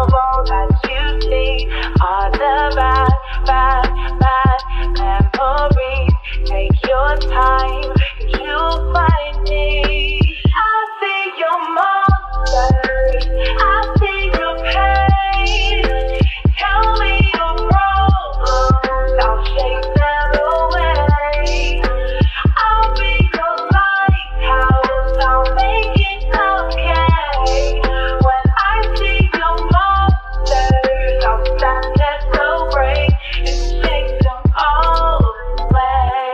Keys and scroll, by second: 4.6 ctrl+z, 5.0 ctrl+z, 31.5 u.